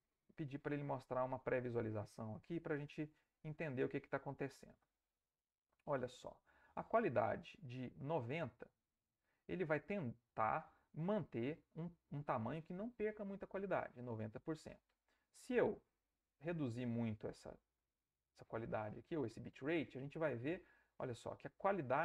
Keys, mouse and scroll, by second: 0.6 click, 2.7-5.1 drag, 5.5-7.0 drag, 7.5-9.9 middle drag, 10.1 ctrl+middle click, 11.6 middle click, 15.7-18.8 drag.